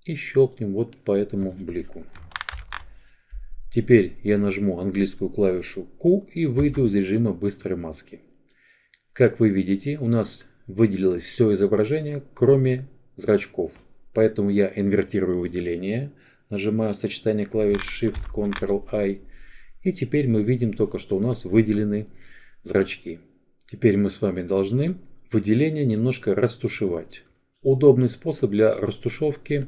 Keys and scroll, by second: 5.0 q, 5.7 q.